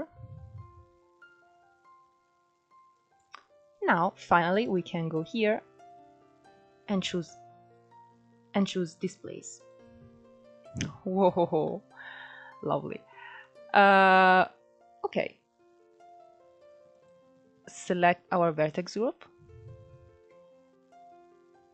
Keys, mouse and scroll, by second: 3.8 click, 5.5-10.5 drag, 11.9-12.5 scroll down 4, 12.5-13.9 middle drag, 13.9 scroll up 2, 14.3-17.3 middle drag, 17.8-21.0 drag.